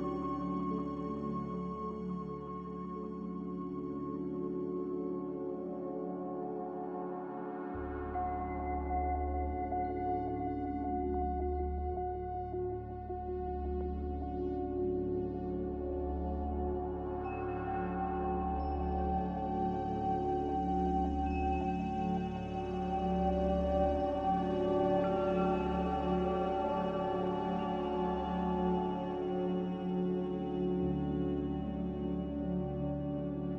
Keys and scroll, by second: 1.6 z, 7.9 1, 7.9 0, 8.1 Return, 17.7 z, 22.6 Escape, 26.1 z.